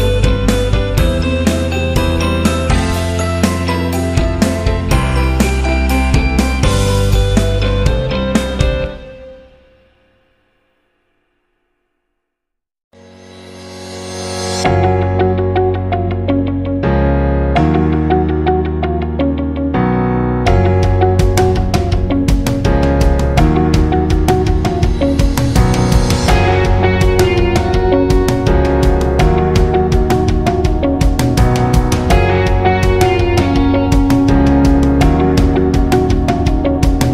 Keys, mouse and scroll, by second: 0.0 shift+click, 1.6 click, 3.4-4.5 scroll up 1, 5.0 click, 5.7 alt+click, 6.8 Left, 7.2 Left, 7.2 Up, 7.4 Right, 8.1 Left, 8.1 Up, 8.1 Right, 9.4-11.5 drag, 12.4 alt+click, 13.8-20.0 drag, 20.7-28.5 alt+shift+drag, 37.0 click.